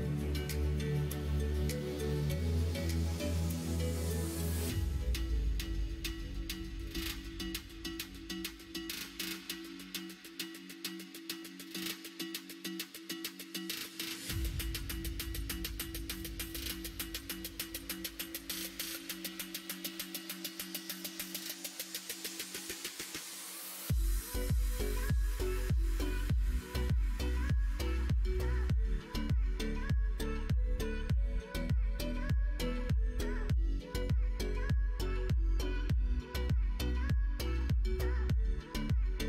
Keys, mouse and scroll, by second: 1.3 g, 5.1 x, 10.3 x, 11.8 alt+click, 12.5 ctrl+b, 33.6 alt+click, 34.6 g.